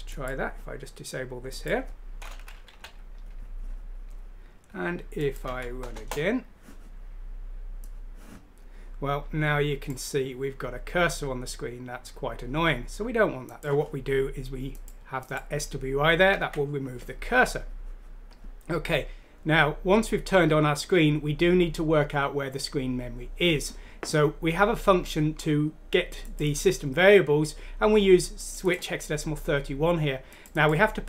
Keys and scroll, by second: 2.7 ;, 5.4 F6, 5.9 Return, 16.4 ctrl+z.